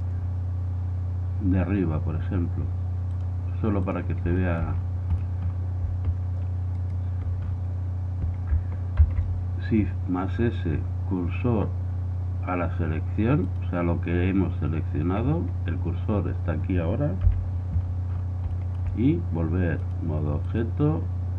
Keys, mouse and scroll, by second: 4.0-4.9 drag, 4.5 middle click, 4.6 right click, 4.9-6.9 middle drag, 6.9-8.5 right drag, 8.5 middle click, 9.1 shift+s, 17.4 KP_1, 17.9 middle click, 19.7 middle click, 21.2 click.